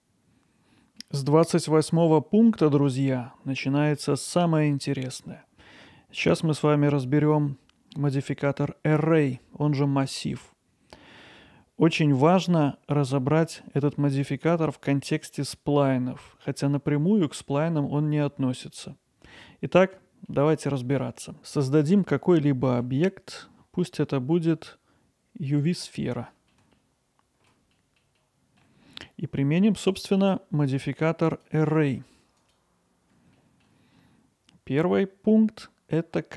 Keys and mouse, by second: 1.3-3.1 middle drag, 7.1-7.9 middle drag, 20.4-20.9 middle drag, 22.7 shift+a, 26.4 alt+middle click, 26.9-27.5 ctrl+alt+middle drag, 31.3-33.3 drag, 33.5 alt+middle click.